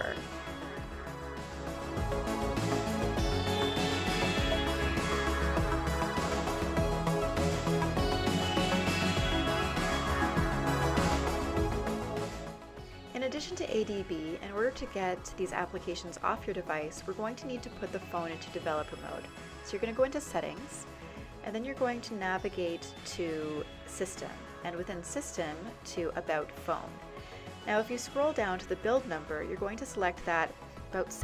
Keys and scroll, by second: 0.0-2.7 typing, 5.3-6.1 typing, 6.4 Return.